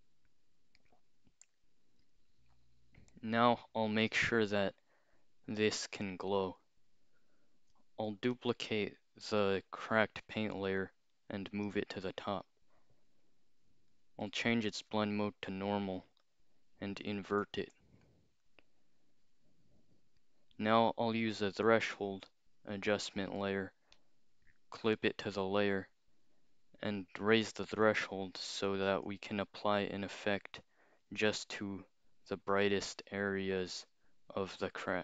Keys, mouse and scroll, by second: 0.8 click, 1.6 click, 6.5 click, 8.4-11.6 alt+drag, 13.9 click, 14.9 click, 16.0 click, 16.5 scroll down 2, 17.3 ctrl+i, 20.2 click, 23.1 click, 23.5-24.0 scroll up 2, 24.0 right click, 24.9 click, 27.6-30.1 drag, 32.2-35.0 drag.